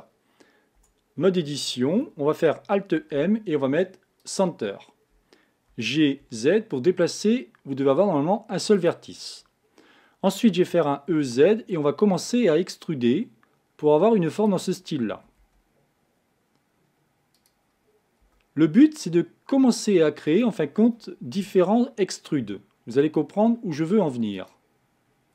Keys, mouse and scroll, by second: 0.8 Tab, 3.0 alt+m, 5.8 g, 10.8 e, 15.2 e, 18.2 e, 21.5 e.